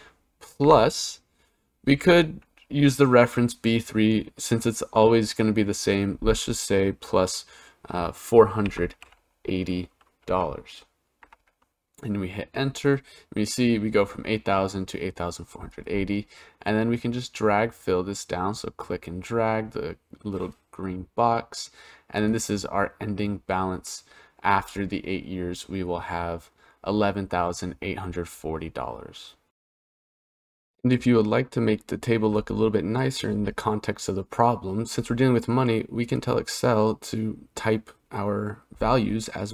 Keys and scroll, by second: 8.4 4, 8.8 8, 10.0 0, 11.0 Return.